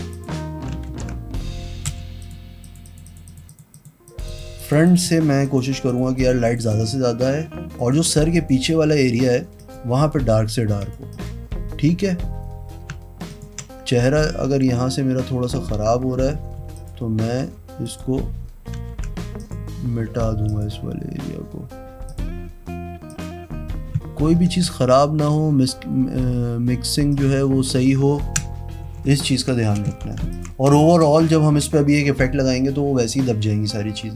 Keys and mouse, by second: 0.3 click, 1.1 ctrl+z, 2.1 b, 2.4 click, 2.8 click, 3.0 click, 3.2 click, 3.5 click, 5.7 click, 6.1 click, 6.3 click, 6.7 click, 6.9 click, 8.0 click, 8.5 click, 9.4 click, 9.8 click, 11.0 click, 11.3 click, 13.5 ctrl+click, 16.8 z, 17.1 click, 17.6 e, 18.1 click, 19.1 ctrl+d, 19.6 click, 20.3 e, 20.7 click, 22.3 click, 23.3 click, 24.6 ctrl+KP_Add, 25.4 click, 27.3 click, 28.4 ctrl+KP_Subtract, 29.0-31.8 typing, 29.4 alt+click, 30.5 alt+click, 31.4 click.